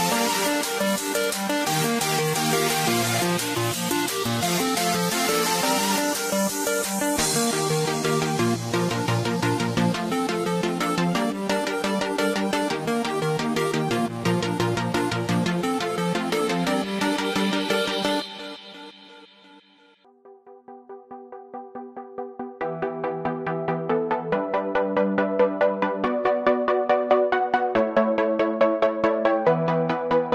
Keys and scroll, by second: 1.2 ], 3.6 ], 9.7 space.